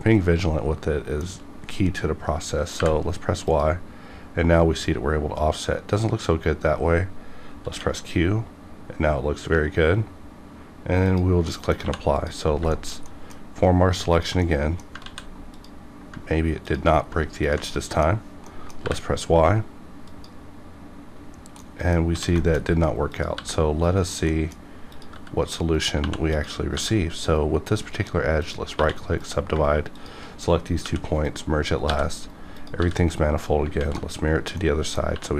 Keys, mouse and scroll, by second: 2.7 y, 3.4 click, 7.7 q, 8.8 q, 11.1 click, 11.5 middle click, 11.8 2, 12.1 click, 12.5 scroll down 1, 12.7 shift+middle click, 13.1 middle click, 14.1 ctrl+click, 14.4 middle click, 15.0 ctrl+z, 15.5 ctrl+click, 16.6 ctrl+click, 17.4 ctrl+click, 17.7 middle click, 18.9 y, 20.0 click, 21.6 middle click, 22.1 1, 22.4 shift+middle click, 22.7-23.1 scroll up 1, 23.1 click, 23.3 g, 24.0 right click, 24.3 middle click, 24.8 click, 25.1 g, 25.5 right click, 26.0 2, 26.3 click, 26.7 g, 27.2 right click, 27.6 right click, 28.4 click, 28.8 1, 29.2 click, 29.5 click, 29.9 shift+click, 30.8 m, 31.1 click, 31.6 scroll down 1, 31.9 g, 32.2 right click, 32.2 right click, 32.6 click, 32.8 g, 33.1 right click, 33.4 scroll down 1, 33.7 alt+x, 34.4 scroll down 1, 34.6 middle click, 35.1 2.